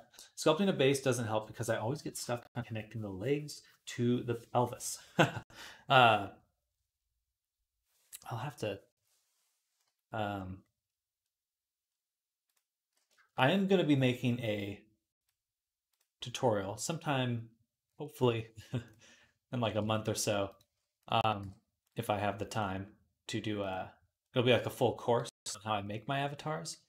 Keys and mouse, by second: 11.2 click, 11.2 middle click, 11.2 right click, 11.7 click, 11.7 middle click, 11.7 right click, 12.9 shift+click, 12.9-19.7 shift+middle drag, 13.0-19.7 shift+right drag, 15.0 click, 18.7 click, 19.7-24.5 shift+drag, 21.2 m, 23.4 right click, 24.5-26.2 right drag, 26.5 middle click.